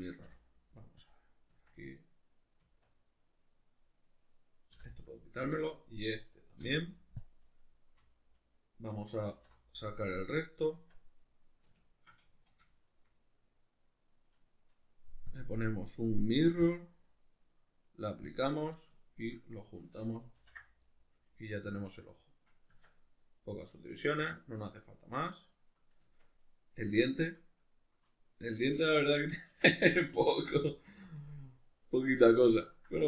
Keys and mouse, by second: 0.3 p, 1.5 Tab, 4.0 right click, 4.7 l, 9.3 alt+h, 10.0-11.2 middle drag, 10.7 Tab, 11.2 right click, 11.7-15.3 shift+middle drag, 12.3 z, 15.3-19.0 drag, 19.0 shift+right click, 20.4 ctrl+j, 20.9-23.8 middle drag, 22.7 Tab, 23.8 right click, 24.2 a, 24.8-26.4 middle drag, 26.0 Tab, 26.4 right click, 26.9 shift+right click, 27.6 right click, 28.8 alt+q, 29.5-31.1 ctrl+middle drag, 30.4 g, 31.1 click, 31.3-33.0 middle drag.